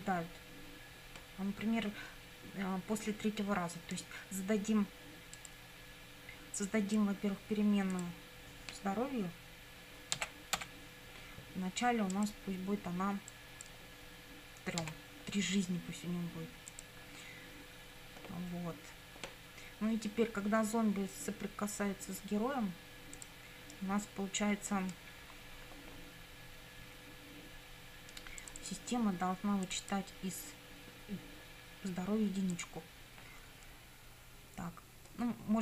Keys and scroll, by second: 10.2 h, 10.6 p, 14.8 3.